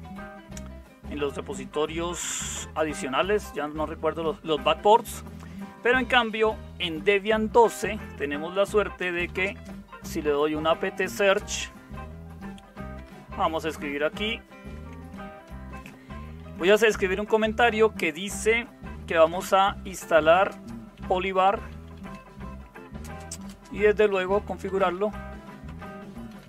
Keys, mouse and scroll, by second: 8.7-11.6 typing, 13.0-15.4 typing, 19.0-26.4 typing.